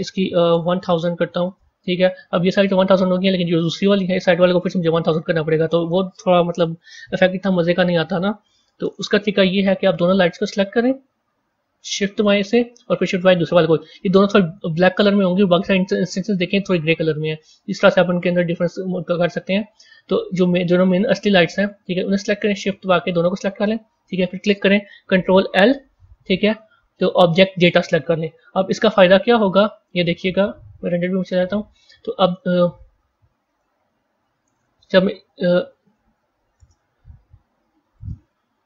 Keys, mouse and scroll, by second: 0.6 KP_0, 4.2 drag, 5.5-6.7 drag, 6.7 KP_0, 6.9 KP_0, 8.1 BackSpace, 10.4 click, 11.7-13.1 middle drag, 13.1 shift+click, 14.6 a, 18.1 z, 21.5 click, 22.8 shift+click, 25.3 ctrl+l, 29.4 click, 30.2 z, 32.4 click, 33.4 click, 34.5-35.7 drag, 35.7 KP_0, 37.9-38.6 drag.